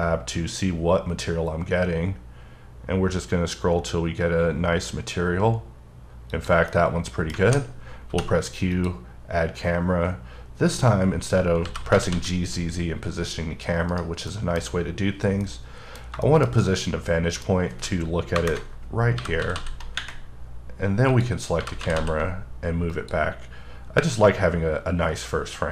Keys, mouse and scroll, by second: 2.6-3.1 scroll down 1, 3.1-3.7 scroll up 1, 3.7-4.6 scroll up 2, 4.6-5.7 scroll up 2, 5.7-6.3 scroll down 1, 6.3 click, 6.7 middle click, 7.4 alt+a, 8.1 q, 8.7 click, 11.6 g, 11.9 z, 13.9 right click, 14.3 middle click, 14.6-15.4 scroll up 6, 15.4 middle click, 16.5 shift+scroll down 2, 16.6 middle click, 18.4 KP_0, 19.2 g, 19.6 z, 21.1 click, 21.6 g, 21.8 z, 22.9 click, 23.4-24.0 scroll up 2, 24.0 scroll up 2, 25.1-25.7 scroll down 2.